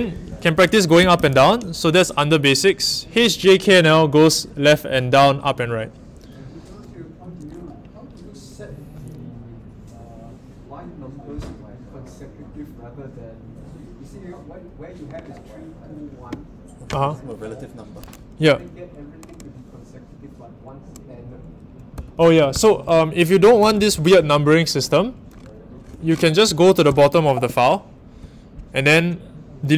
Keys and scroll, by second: 0.0-1.8 typing, 21.7-24.6 typing, 26.4-28.5 typing.